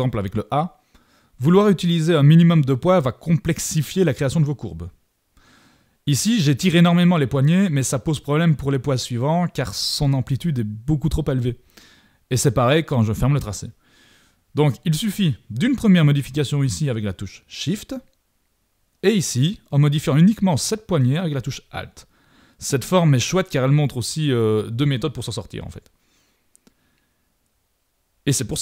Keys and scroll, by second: 13.1 super+=.